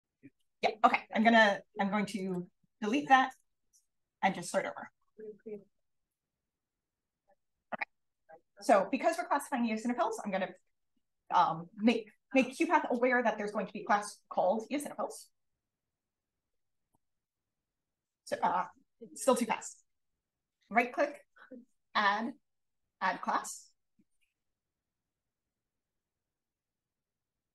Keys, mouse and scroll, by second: 0.0 s, 2.2 click, 6.0 click, 7.4 click, 16.6 click, 26.2 click.